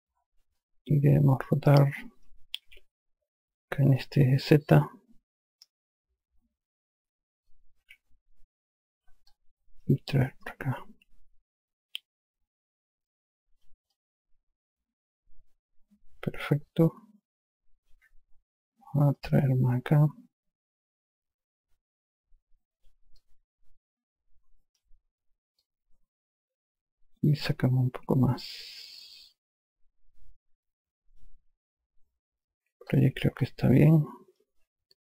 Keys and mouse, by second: 0.9 click, 3.0 r, 4.8 click, 8.1 e, 9.6 click, 10.7 click, 14.2 click, 19.5 click, 23.5 alt+click, 25.9 click, 33.2 click, 33.7 alt+click.